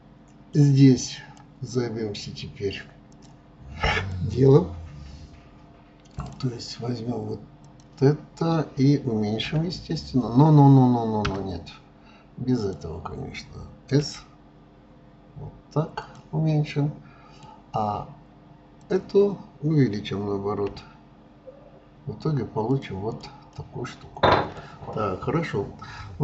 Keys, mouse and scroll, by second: 1.1 click, 3.1-6.4 drag, 7.6 click, 9.4 s, 12.6 click, 14.0 s, 16.5-18.8 middle drag, 18.8 click, 20.7 s, 23.1 click, 23.5-26.2 middle drag.